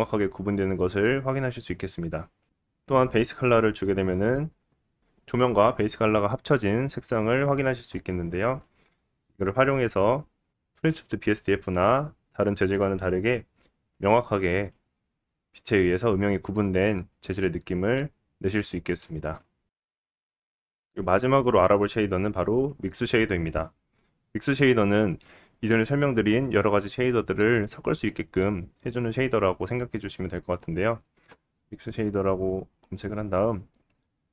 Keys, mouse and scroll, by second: 2.5-16.9 middle drag, 16.9-20.0 drag, 20.0-30.3 middle drag, 30.7 click, 31.0 x, 31.3 click, 31.9 shift+a, 32.8 BackSpace.